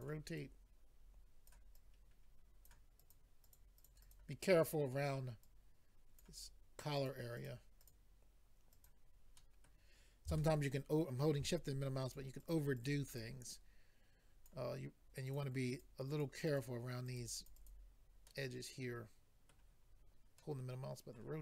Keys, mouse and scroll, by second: 0.3 click, 2.6 click, 3.0 click, 3.1 click, 3.4 click, 3.5 double click, 3.8 click, 3.8 click, 4.0 click, 4.1 double click, 4.4-5.3 scroll up 5, 6.2 click, 6.4-7.0 scroll down 2, 7.0 click, 7.0 click, 7.3 click, 7.5 double click, 7.7 scroll down 2, 7.8 double click, 7.9 double click, 8.7 double click, 8.8 double click, 9.3 middle click, 10.3 shift+middle click, 12.0 click, 12.2 click, 12.4 click, 12.5 double click, 12.8 double click, 12.8 double click, 13.1 double click, 13.2 double click, 13.6 double click, 15.3 click, 15.3 click, 15.7 click, 15.8 double click, 16.1 double click, 16.2 double click, 16.4 double click, 16.6 double click, 17.1 double click, 17.5 double click, 17.5 double click, 17.7 double click, 18.2 middle click, 19.8-20.1 scroll down 3, 20.4 middle click.